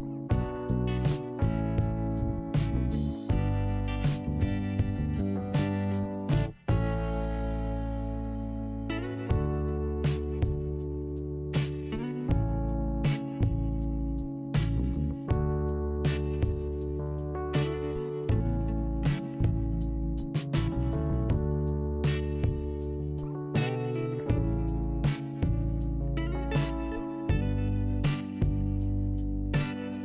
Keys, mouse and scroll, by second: 0.5 click, 2.3 click, 3.8 click, 6.2 click, 8.2 click, 11.0 click, 13.1 click, 15.2 scroll down 1, 18.4 5, 20.3 click, 21.1 scroll down 1, 21.7 click, 22.8-23.2 scroll up 1, 23.9 click, 26.3-27.0 scroll down 1, 28.1 click, 29.5 click.